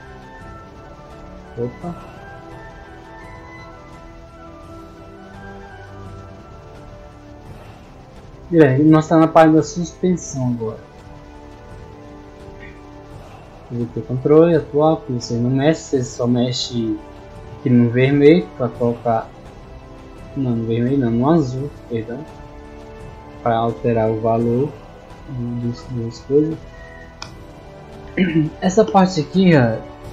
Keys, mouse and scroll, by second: 1.6 click, 5.0 click, 6.0-6.4 scroll down 2, 7.2-8.3 scroll up 2, 8.4-8.8 scroll up 4, 10.1-10.5 scroll up 2, 11.1-11.8 scroll up 4, 11.8 middle click, 12.9 middle click, 14.1-14.8 scroll down 2, 15.2-15.8 scroll down 2, 22.1-23.0 scroll down 2, 23.3 scroll down 1, 24.1 middle click.